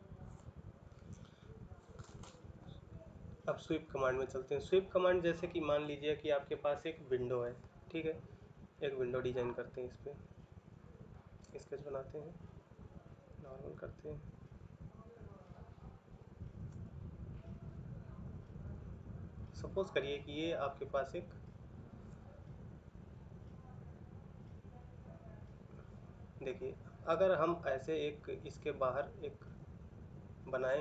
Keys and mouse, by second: 0.7 middle click.